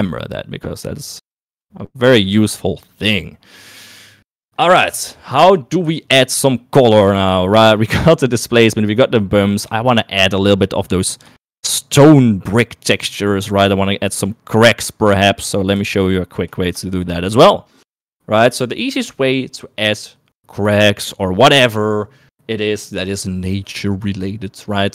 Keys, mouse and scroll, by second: 4.6 middle click, 6.6 shift+middle click, 10.3 shift+middle click, 12.0 shift+middle click, 16.5 shift+middle click, 17.4 shift+middle click.